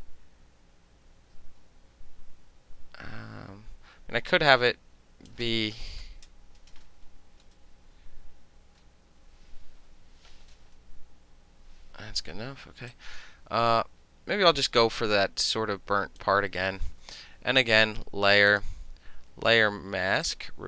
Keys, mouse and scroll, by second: 5.4-6.5 middle drag, 12.2 middle click, 13.0-16.3 drag, 16.3 middle click, 17.1 KP_3, 18.6 click, 20.3 click.